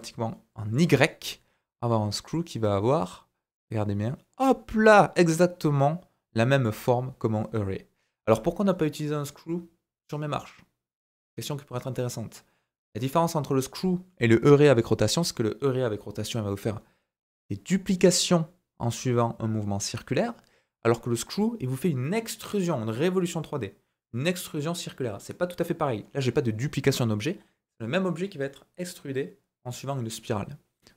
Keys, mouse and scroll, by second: 3.5-6.6 drag, 7.1-7.9 scroll down 2, 7.9-11.0 scroll up 1.